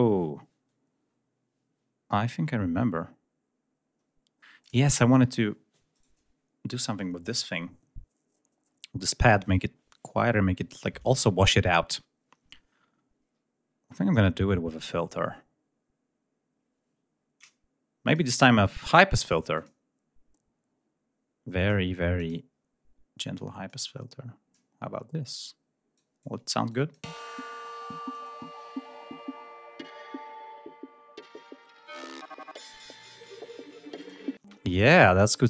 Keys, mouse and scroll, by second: 0.8 scroll down 2, 1.1 scroll up 1, 2.3-3.1 scroll up 5, 4.4 click, 5.8 right click, 17.9 click, 19.4 click, 22.0 click, 23.5 click, 25.8 click, 26.5 click, 26.9 space, 27.7-32.8 drag, 33.8 click, 34.2 space.